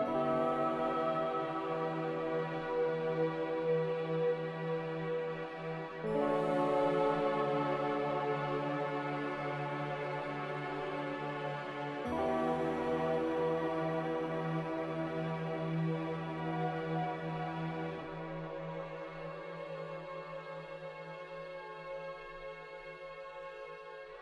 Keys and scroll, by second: 0.8 ctrl+z, 16.2 q.